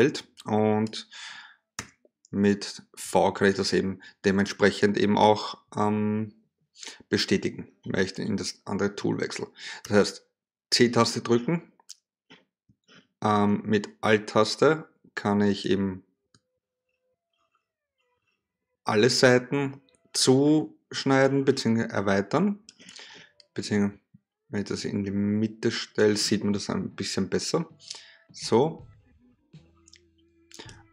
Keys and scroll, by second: 1.3 v, 9.4 c.